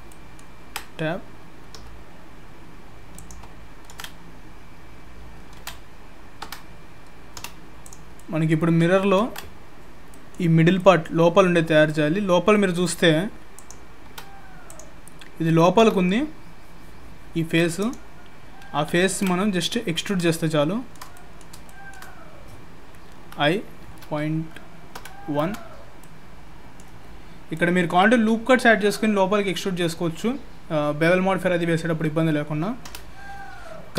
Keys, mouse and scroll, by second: 3.9 ctrl+z, 5.6 ctrl+z, 6.4 Tab, 7.3 3, 7.8 click, 8.2 middle click, 20.0-20.3 scroll up 2, 20.3 shift+middle click, 21.1 middle click, 21.7 shift+middle click, 23.2 i, 26.0 middle click, 27.0-27.5 scroll up 1, 27.5 middle click.